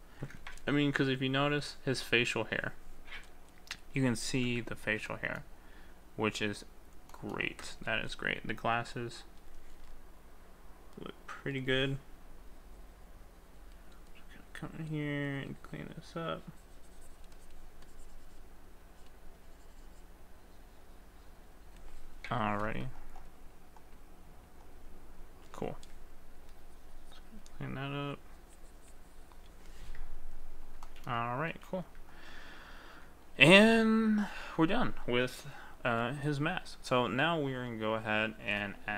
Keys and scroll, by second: 31.6 ctrl+s.